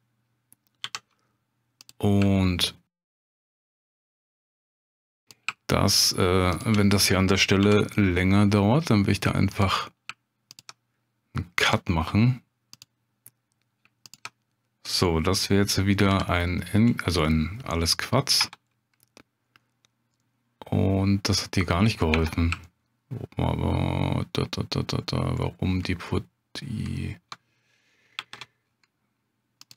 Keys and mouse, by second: 0.8 j, 3.0 shift+click, 4.1 j, 6.6 shift+click, 7.6 j, 9.6 click, 10.5 shift+click, 11.6 j, 12.7 click, 16.1 j, 17.3 click, 19.4 Tab, 20.2-21.9 drag, 21.4 right click, 22.1 Tab, 22.6 shift+click, 25.5 middle click, 26.2 middle click, 28.2 ctrl+r.